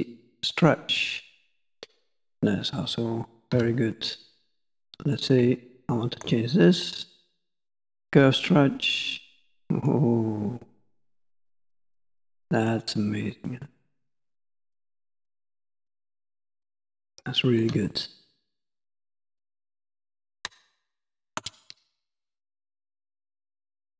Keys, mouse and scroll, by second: 0.4 click, 0.5 click, 1.9 middle click, 3.6 2, 4.2 click, 4.7 middle click, 5.9 ctrl+click, 6.4 middle click, 8.1 click, 14.7 middle click, 16.4 shift+middle click, 17.1 middle click, 17.9 shift+middle click, 18.5 middle click, 20.0 shift+middle click, 20.7 ctrl+middle click.